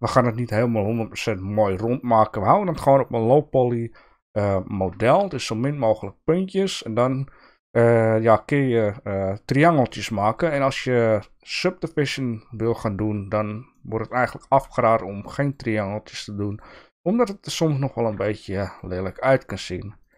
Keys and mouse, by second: 5.1 ctrl+r, 10.0 shift+middle click, 13.7 shift+middle click, 14.6 ctrl+r, 17.0 click, 17.9 ctrl+r.